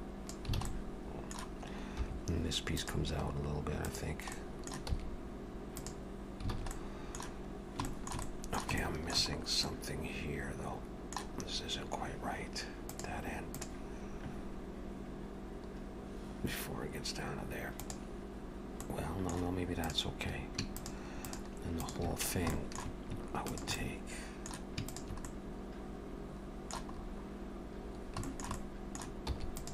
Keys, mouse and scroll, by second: 0.6 alt+a, 0.7 middle click, 2.0 3, 2.8 click, 3.8 click, 4.4 middle click, 4.9 e, 6.6 alt+a, 6.7 middle click, 7.6 scroll down 1, 7.9 shift+middle click, 8.3 middle click, 8.8 shift+middle click, 9.4 scroll up 1, 9.6 middle click, 11.4-11.8 scroll up 2, 18.8 middle click, 19.9 click, 20.7 shift+click, 21.8 click, 22.2-22.5 scroll down 3, 22.5 shift+middle click, 23.5 shift+click, 23.8 middle click, 24.9 shift+click, 25.3 middle click, 26.9 scroll up 2, 27.9 scroll down 1, 28.0 scroll down 1, 28.3 shift+middle click, 28.6 middle click, 29.3 e.